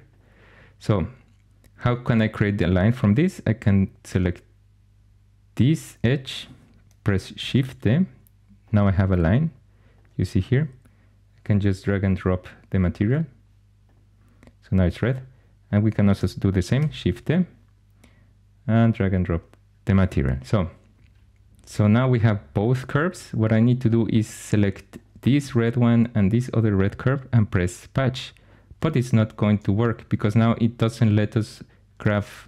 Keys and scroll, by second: 7.3 shift+d, 16.7 shift+d.